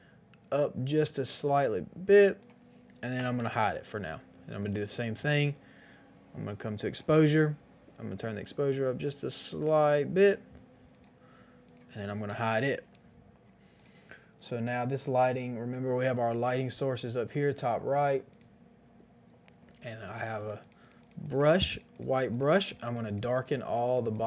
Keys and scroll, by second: 3.1 ctrl+i, 12.2 ctrl+i.